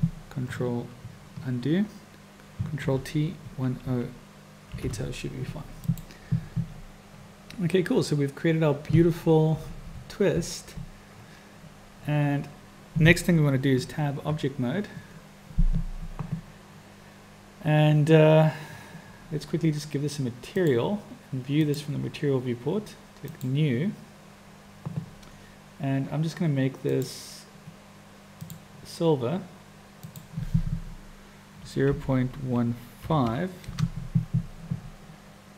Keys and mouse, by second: 0.8 ctrl+z, 2.8 ctrl+t, 13.8 Tab, 20.6 click, 23.5 click, 26.9-28.7 drag, 30.2-34.6 drag.